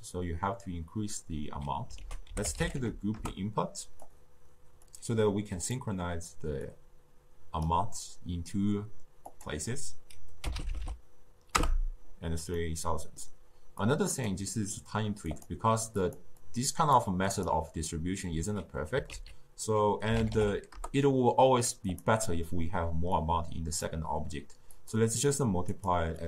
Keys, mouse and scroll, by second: 1.9 ctrl+a, 4.8 drag, 6.6-10.6 drag, 10.6 0, 10.7 0, 12.5-13.7 middle drag, 13.7 click, 14.4-15.2 middle drag, 15.2 click, 15.9 click, 16.4-17.4 drag, 19.1 ctrl+a, 23.1 click, 24.7-26.2 drag.